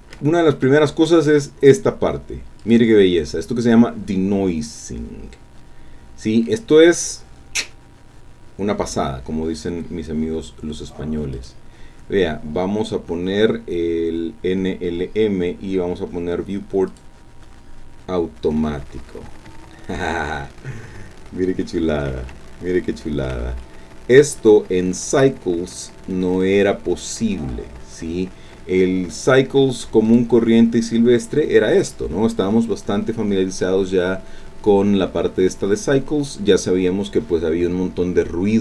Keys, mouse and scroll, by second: 2.6 click, 11.3 click, 16.9 click, 19.7-22.1 scroll up 2, 22.2 shift+click, 22.3-23.4 shift+middle drag, 23.6 shift+click, 23.7-25.4 shift+middle drag, 25.7-27.1 scroll up 2, 27.1 scroll down 1, 30.1 click.